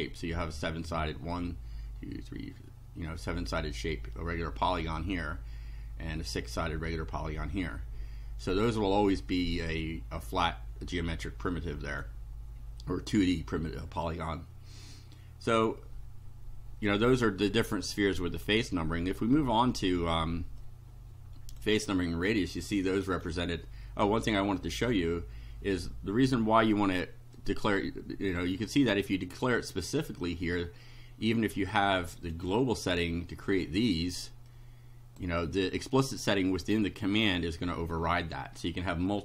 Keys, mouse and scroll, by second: 7.7-9.8 right drag, 8.6-9.8 drag, 11.5 right click, 14.8-15.8 right drag, 16.9-18.6 drag, 20.7-21.8 drag, 22.8 shift+right click, 27.4-28.5 drag, 30.6 scroll down 2, 31.3-32.5 right drag, 32.5 scroll down 1, 34.5 click, 36.3-37.4 drag, 37.6 scroll down 1, 38.2 shift+right click.